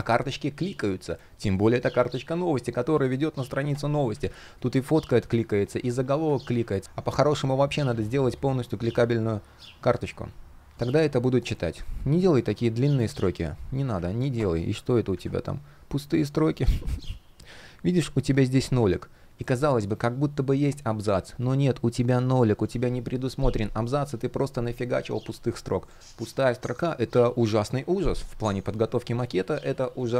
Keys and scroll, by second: 3.8 super+z, 6.1 super+z, 12.6 super+z, 14.7 super+\.